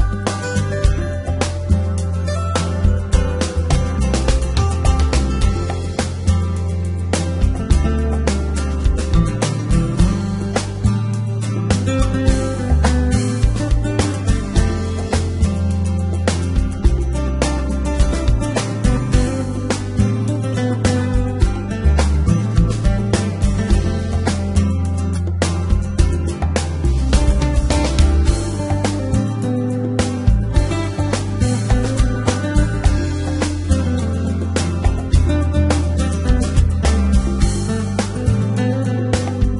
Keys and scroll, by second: 1.0 g, 1.1 z, 6.1 g, 6.7 y, 8.8 g, 9.0 y, 11.7 g, 11.9 y, 13.7 g, 13.9 y, 15.6 g, 15.7 z, 16.9 Tab, 21.4 Tab, 25.7 g, 25.8 z, 26.8 x, 28.1-31.1 typing, 32.6 Tab, 36.3 Tab, 38.6 g, 38.7 x.